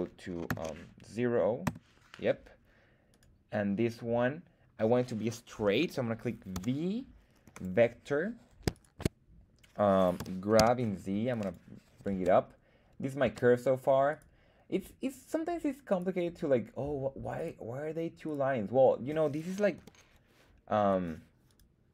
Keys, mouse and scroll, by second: 3.1 right click, 3.2 click, 6.5 v, 8.7 shift+click, 8.7 shift+right click, 10.2 g, 10.6 z, 11.4 click, 12.1 Tab, 13.2 Tab, 14.1 click, 14.1 right click, 15.0 click, 15.0 right click, 15.9 click, 15.9 right click, 17.4 click, 17.4 right click, 18.2 click, 18.2 right click, 19.8 r, 20.7 Escape, 21.5 click, 21.5 right click.